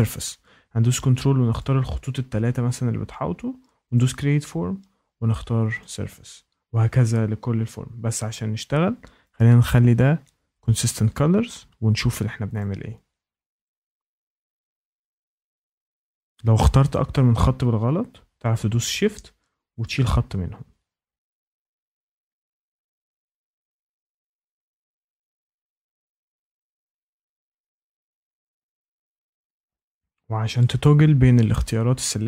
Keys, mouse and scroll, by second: 1.5 ctrl+click, 3.9 click, 5.8 click, 9.3 click, 10.7 click, 12.5 click, 13.6 ctrl+click, 19.8 shift+click, 21.4 ctrl+click, 21.6 ctrl+click, 21.9 click, 22.2 click, 22.5 click, 22.7 ctrl+click, 22.8 ctrl+click, 23.0 ctrl+click, 23.4 click, 23.7 click, 23.9 click, 24.1 ctrl+click, 24.2 ctrl+click, 24.4 click, 24.6 click, 24.9 click, 25.0 ctrl+click, 25.1 ctrl+click, 25.3 ctrl+click, 25.7 click, 26.0 click, 26.2 click, 26.4 ctrl+click, 26.6 ctrl+click, 27.0 click, 27.3 click, 27.5 click, 27.7 ctrl+click, 27.8 ctrl+click, 28.0 ctrl+click, 28.2 click, 28.5 click, 28.7 click, 28.8 ctrl+click, 29.3 click, 29.5 click.